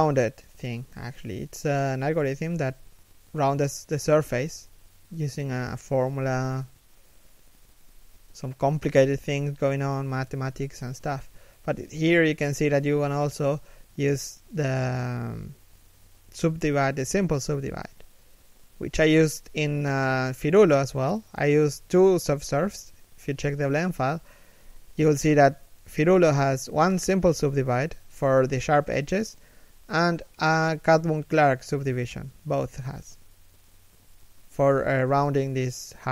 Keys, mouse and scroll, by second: 2.4 z, 3.2 shift+middle click, 5.2 shift+middle click, 5.5 scroll up 1, 5.8 z, 6.5 shift+middle click, 7.2 middle click, 7.6 z, 7.8 middle click, 8.6 1, 9.3 z, 11.6 scroll down 1, 13.5 z, 14.3 shift+middle click, 14.6 z, 16.3 shift+middle click, 16.8 scroll down 1, 17.0 shift+middle click, 17.4 scroll up 1, 17.9 shift+middle click, 35.0 shift+middle click, 35.9 a.